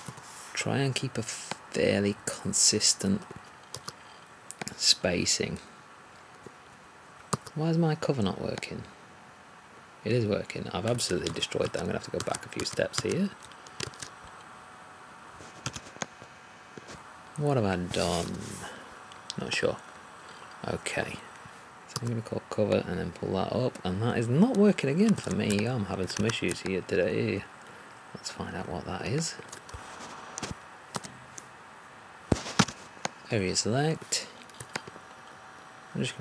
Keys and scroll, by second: 26.2 1, 30.9 3.